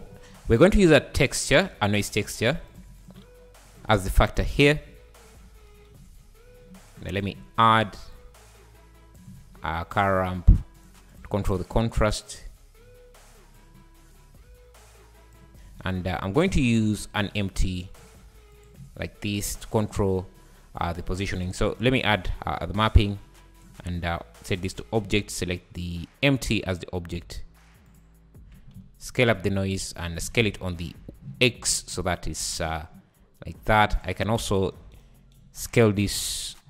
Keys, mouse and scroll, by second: 0.5 shift+a, 3.7-4.9 drag, 4.9-5.7 scroll up 3, 6.2 `, 7.0-9.3 drag, 9.3 shift+a, 10.3 shift+a, 11.9-14.9 drag, 16.1 scroll down 1, 16.3 `, 16.5 shift+a, 19.5 click, 19.8 click, 20.8 click, 21.5 ctrl+t, 22.9-24.6 drag, 24.7 click, 27.9 click, 28.8 s, 29.8 `, 30.2 s, 33.2 s, 33.9 click, 34.5 scroll down 5, 35.6-36.5 scroll up 5, 36.5 click.